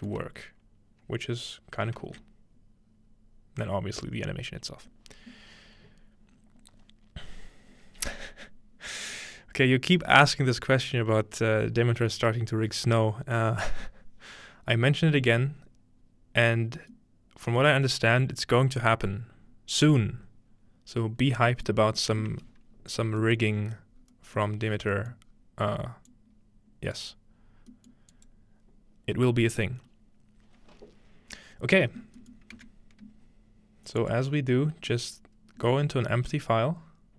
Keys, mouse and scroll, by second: 0.8-2.0 scroll up 1, 2.1 alt+a, 2.8-3.6 scroll up 1, 3.6-4.8 drag, 16.9-22.7 middle drag, 22.7-23.6 scroll down 1, 23.6 scroll up 2, 23.7 scroll down 2, 24.0-25.2 scroll up 2, 25.2-27.0 middle drag, 25.2 scroll down 2, 26.1 click, 27.3-28.0 scroll down 2, 27.7-30.1 middle drag, 28.1 click, 28.8-30.1 drag, 28.8-30.1 scroll down 1, 30.1-30.9 scroll down 1, 32.3-34.0 middle drag, 34.0 click.